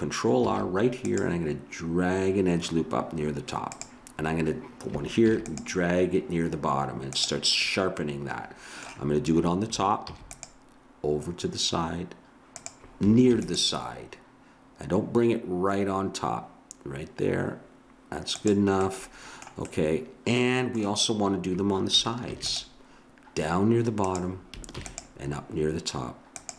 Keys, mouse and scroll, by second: 0.4 ctrl+r, 5.3 ctrl+r, 7.6 click, 8.6 click, 10.1 ctrl+r, 13.3 ctrl+r, 18.8-20.2 middle drag, 22.3 ctrl+r, 24.7 ctrl+r.